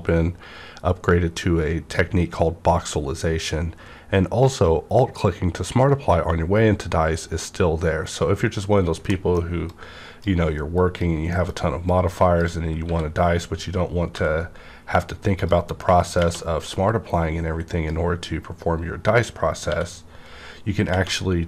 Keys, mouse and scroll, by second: 9.2 middle click, 9.6-11.3 drag, 11.3 middle click, 11.3 middle click, 11.8-14.1 drag, 12.8 w, 14.1 b, 14.9 scroll up 1, 15.4 click, 16.2 _, 16.6-20.9 drag, 19.6 t.